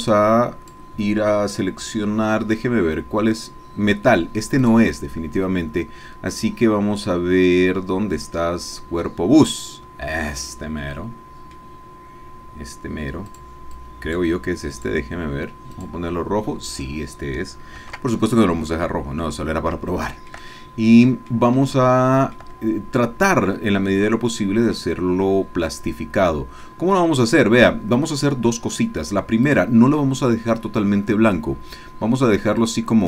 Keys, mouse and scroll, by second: 0.1 click, 4.6-7.1 drag, 9.6 click, 11.0-12.5 drag, 13.3 click, 13.8 click, 14.7 click, 15.8 click, 17.8 ctrl+z, 19.2-21.5 middle drag, 21.7 shift+click, 24.4 click, 25.3 scroll down 1, 25.4-26.4 scroll up 1, 26.4 scroll up 1, 26.6 middle click, 29.5 click, 32.6 click.